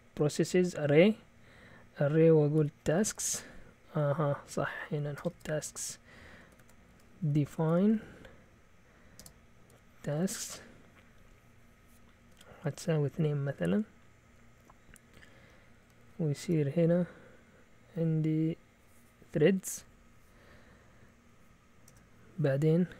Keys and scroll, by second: 2.3-3.7 typing, 4.4 Up, 4.6 Up, 5.2 Return, 5.3 Return, 5.6 Up, 6.3-10.7 typing, 12.3-12.8 typing, 14.1-16.9 typing, 21.9 Return.